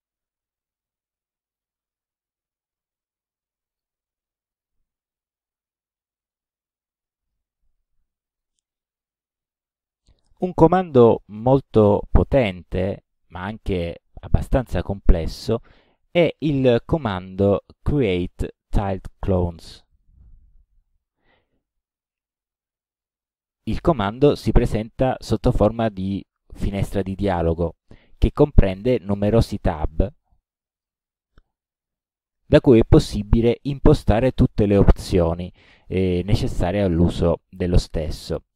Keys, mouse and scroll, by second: 0.2-1.8 drag, 3.8 click, 5.5-6.0 ctrl+scroll up 3, 6.4-7.6 ctrl+middle drag, 16.7 click, 20.0 click, 23.3 middle click, 24.1 ctrl+scroll down 2, 24.3 ctrl+middle click, 29.2 click, 29.8 click, 30.3 click, 30.8 click, 31.4 click, 31.9 click, 32.6 click.